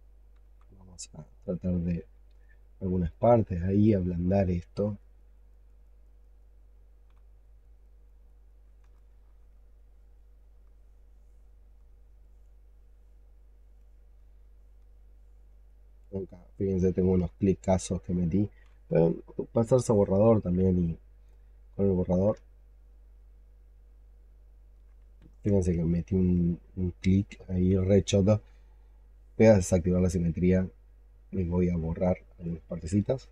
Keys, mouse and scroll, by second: 1.1 double click, 1.4 double click, 1.6 double click, 1.8 double click, 2.0 double click, 2.3 double click, 2.5 double click, 2.6 double click, 2.8 double click, 3.0 double click, 3.1 double click, 3.3 double click, 3.6 double click, 3.7 double click, 4.9 double click, 5.1 double click, 5.2 double click, 5.4 double click, 5.5 double click, 5.7 double click, 5.9 double click, 6.1 double click, 6.3 double click, 6.9 click, 7.3 x, 7.5 double click, 7.7 double click, 8.0 double click, 8.1 double click, 8.4 double click, 8.8 alt+click, 9.6 alt+click, 10.1 alt+middle click, 10.6 alt+click, 10.7 alt+right click, 11.0 alt+click, 12.1 alt+click, 13.7 alt+click, 14.4 alt+middle click, 15.6 alt+click, 16.2 alt+click, 19.3 double click, 22.3 ctrl+right click, 23.1 ctrl+alt+middle click, 23.7 ctrl+right click, 25.1 ctrl+z, 25.8 alt+click, 33.0 ctrl+click.